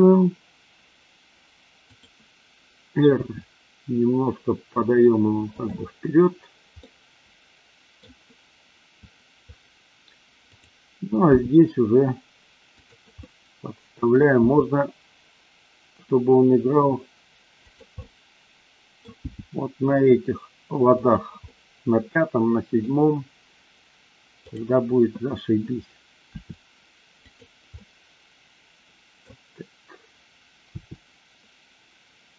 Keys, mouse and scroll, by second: 1.9 click, 3.1 r, 5.5 click, 6.9-8.1 middle drag, 10.4 click, 11.4 g, 13.2 middle click, 13.3 scroll up 1, 13.4 middle click, 14.3 g, 17.6 click, 18.0 scroll up 1, 18.1 middle click, 19.3 g, 21.0 click, 21.5-23.0 middle drag, 24.5 click, 26.2 r, 27.2 click, 27.7-29.2 middle drag, 30.6 r.